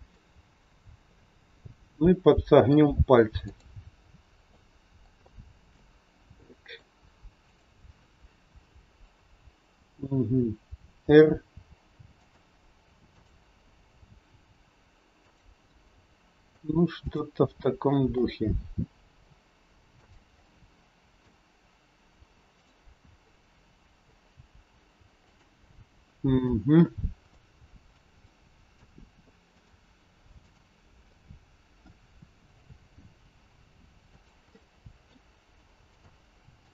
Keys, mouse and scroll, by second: 0.1 middle click, 3.4 click, 3.9-4.5 scroll down 2, 4.5 middle click, 5.2 shift+middle click, 6.2 middle click, 6.2-6.9 scroll up 2, 8.1 click, 13.1 click, 13.9 r, 15.6 middle click, 15.6 scroll up 1, 17.0 click, 18.3 middle click, 18.4 r, 20.4 middle click, 22.6 click, 23.1 scroll up 1, 23.3 middle click, 24.3 r, 26.9 middle click, 27.4 shift+middle click, 28.0 scroll up 1, 28.3 middle click, 29.5 click, 30.3 click, 31.0 middle click, 32.6 r, 34.5 middle click.